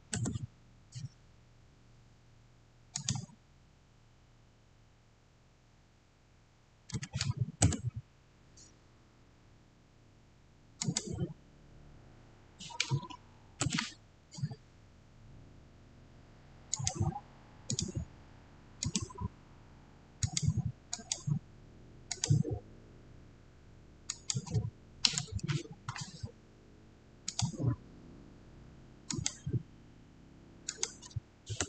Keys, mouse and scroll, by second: 2.8 Return, 2.8 click, 6.9 6, 7.5 Return, 10.7 click, 13.5 click, 13.6 Return, 16.6 Return, 16.6 click, 24.4 click, 27.1 click, 27.2 click, 31.5 Return.